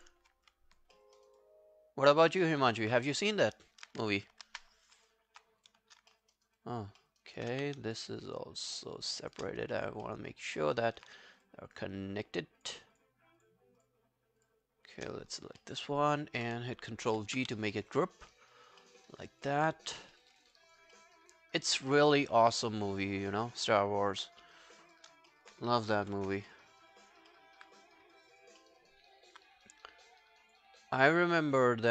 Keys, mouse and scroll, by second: 0.3 scroll down 2, 0.5 alt+click, 1.0 alt+middle click, 1.2 alt+right click, 1.4 alt+click, 2.3 alt+middle click, 2.4 alt+right click, 2.6 alt+click, 3.5 alt+middle click, 3.8 alt+right click, 6.1 alt+middle click, 6.4 alt+right click, 6.6 alt+click, 7.0 alt+middle click, 7.2 alt+right click, 7.5 q, 7.9 shift+click, 8.2 shift+click, 9.6 alt+click, 10.1 alt+middle click, 10.3 alt+right click, 10.6 alt+middle click, 10.8 alt+right click, 11.4 shift+click, 11.7 shift+click, 15.3 alt+click, 15.6 alt+middle click, 15.8 alt+right click, 17.8 alt+middle click, 18.1 alt+scroll down 2, 18.3 alt+middle click, 18.5 alt+right click, 18.8 alt+middle click, 19.0 alt+right click, 19.3 alt+click, 20.2 alt+middle click, 20.4 alt+right click, 20.4 alt+scroll down 1, 20.6 alt+click, 21.0 alt+middle click, 21.2 alt+right click, 21.9 alt+middle click, 22.2 alt+right click, 22.5 alt+middle click, 22.7 alt+right click, 23.0 alt+click, 23.3 alt+middle click, 24.9 shift+click, 25.3 alt+middle click, 26.0 ctrl+i, 26.5 alt+middle click, 26.7 alt+right click, 27.0 alt+click, 27.3 alt+middle click, 28.2 alt+click, 28.6 alt+middle click, 28.8 alt+right click, 30.5 alt+click, 30.9 alt+scroll down 1.